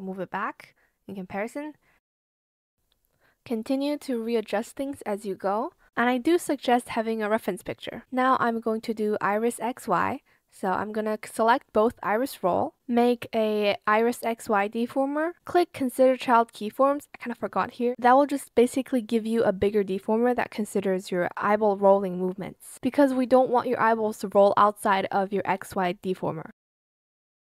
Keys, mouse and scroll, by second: 2.8 shift+click, 4.5 shift+click, 4.6 ctrl+z, 5.0 shift+click, 5.5 click, 5.9 ctrl+z, 10.8 ctrl+click, 13.7-15.4 typing.